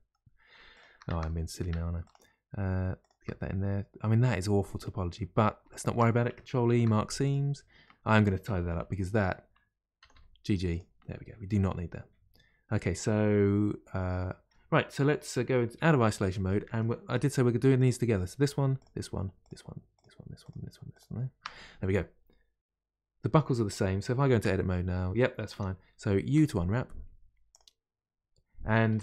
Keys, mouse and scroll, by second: 0.0-15.7 middle drag, 15.7 KP_Divide, 27.5 u.